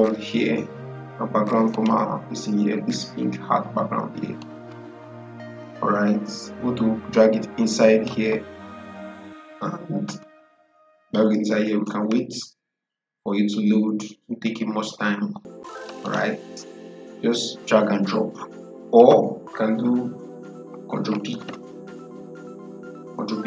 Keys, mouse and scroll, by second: 1.6 click, 4.3-10.4 drag, 15.9 click, 19.1 Delete, 21.2 ctrl+p.